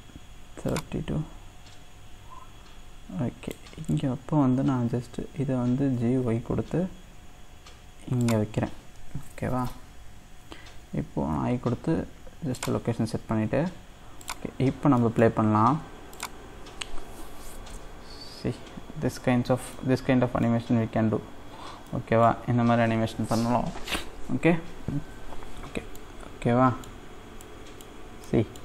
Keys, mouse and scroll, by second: 11.3 i, 14.2 click, 15.0-16.1 middle drag, 16.1-19.8 drag, 19.8-21.3 middle drag, 21.3-21.8 scroll up 3, 21.8-27.1 middle drag, 27.1-27.5 scroll down 1, 27.5-28.6 middle drag.